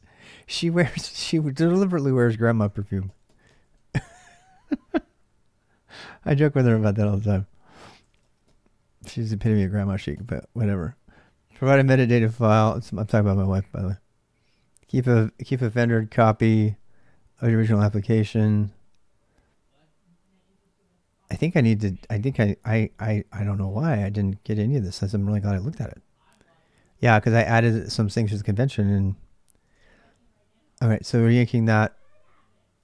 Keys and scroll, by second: 0.0 j, 2.4 k, 2.6 k, 7.5-8.7 typing, 9.9 k, 23.1-28.0 typing, 29.2-30.1 typing, 30.6 ctrl+[, 30.7 ctrl+j, 31.3 shift+z, 31.4 shift+z.